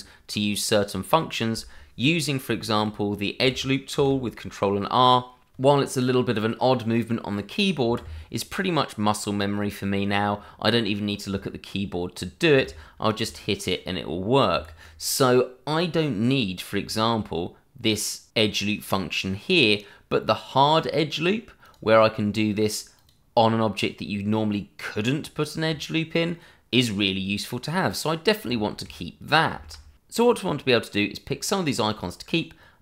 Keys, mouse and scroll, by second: 4.0 ctrl+r, 7.8 Escape, 13.2 ctrl+r, 14.5 Escape, 21.6 click, 28.0 click, 29.5 ctrl+z.